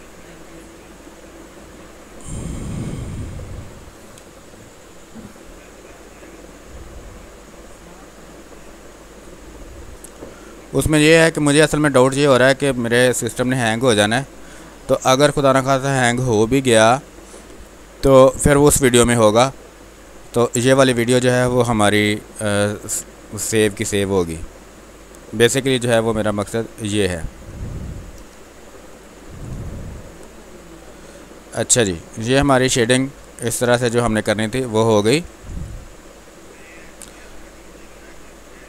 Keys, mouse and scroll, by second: 0.0-1.8 drag, 1.8 w, 2.6 click, 3.8 b, 4.1 space, 5.7 ctrl+click, 6.0-9.6 drag, 9.6 space, 9.7 click, 10.4 space, 10.8-12.8 drag, 12.8 click, 14.0 click, 14.7 space, 15.0 alt+click, 17.7 r, 17.9 click, 18.6 b, 18.9 space, 19.3 ctrl+click, 20.6 click, 21.5 space, 22.1 space, 23.1 click, 23.8 space, 24.0 alt+click, 25.1 ctrl+d, 26.2 ctrl+click, 29.1 ctrl+d, 29.4 space, 29.7 alt+click, 30.9 click, 32.1 space, 32.4 alt+click, 33.5 space, 33.8 ctrl+click, 35.2 ctrl+d, 36.0 ctrl+click.